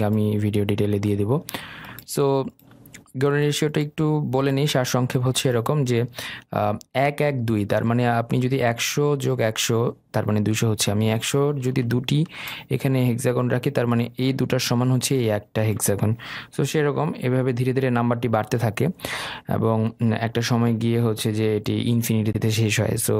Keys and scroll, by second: 17.6 Delete.